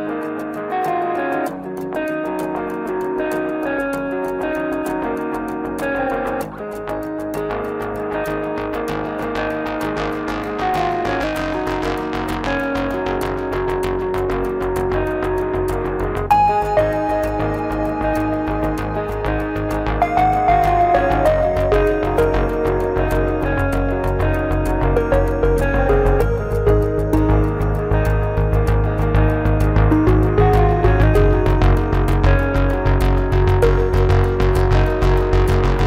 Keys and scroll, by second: 0.7 Return, 2.5 Escape, 7.9 alt+z, 12.2 Escape, 14.7 Return, 17.0 F10, 18.9 Escape, 29.2 Return, 32.5 Return.